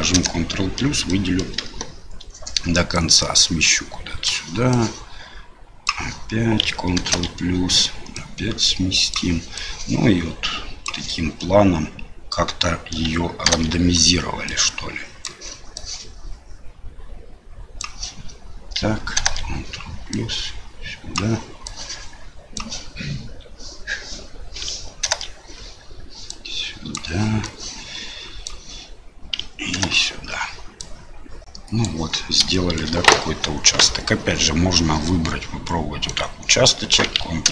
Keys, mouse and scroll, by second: 0.1 ctrl+KP_Add, 1.1 middle click, 1.6 KP_7, 3.0-4.3 drag, 4.8-5.9 drag, 7.0 ctrl+KP_Add, 8.2 click, 9.7-10.8 drag, 13.5 ctrl+KP_Add, 14.5 click, 15.9-17.8 drag, 19.2 ctrl+KP_Add, 20.1-21.2 drag, 21.8 click, 25.0 ctrl+KP_Add, 26.3 click, 27.6 click, 29.8 ctrl+KP_Add, 30.8-31.8 drag, 32.5 middle click, 34.7-36.1 drag, 37.4 ctrl+KP_Add.